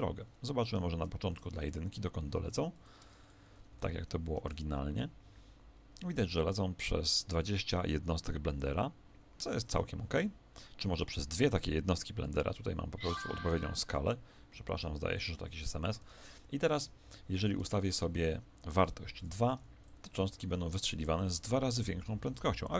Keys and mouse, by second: 1.3-4.6 drag, 3.8 alt+a, 12.6-17.6 middle drag, 16.0 Escape, 17.6 click, 22.2 alt+a.